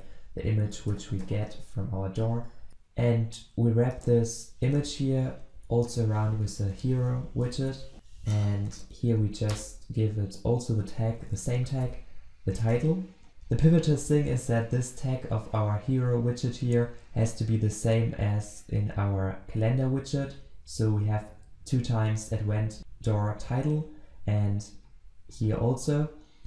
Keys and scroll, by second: 2.7 ctrl+z, 3.9 alt+Return, 8.7 ctrl+space, 9.9 Return.